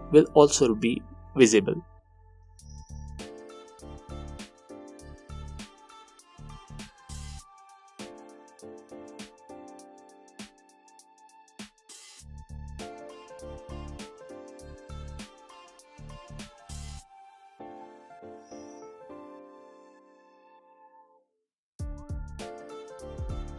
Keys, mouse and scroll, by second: 4.6 click, 7.2-21.2 drag, 21.2-22.8 middle drag, 22.8-23.5 alt+drag.